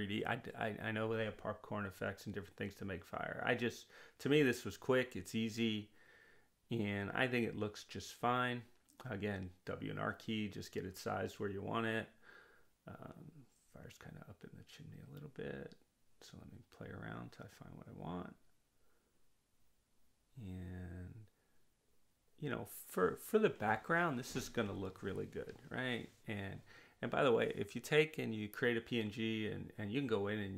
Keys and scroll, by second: 2.0 r, 6.7 w, 13.6 r.